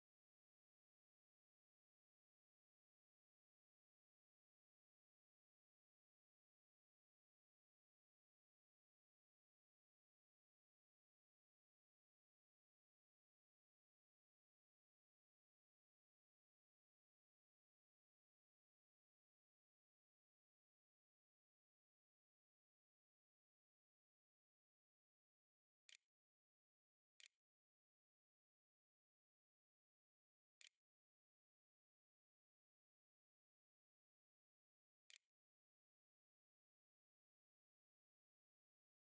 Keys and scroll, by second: 26.0-30.5 typing, 34.1 Escape, 34.9 Return, 35.3-36.9 typing, 38.4-39.1 typing.